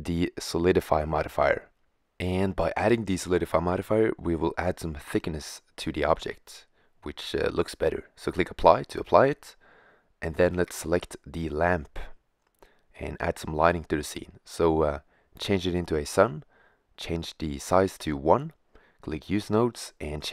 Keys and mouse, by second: 3.4-5.2 drag, 7.9-8.9 drag, 9.7-12.7 middle drag, 12.7-14.3 right drag, 14.3 middle click, 17.5-18.2 middle drag.